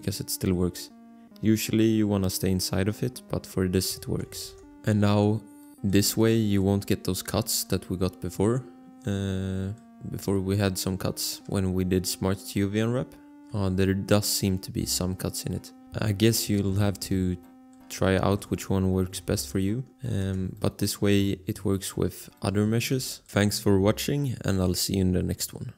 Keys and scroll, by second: 4.6 alt+Tab, 19.4 alt+Tab, 20.2 Tab.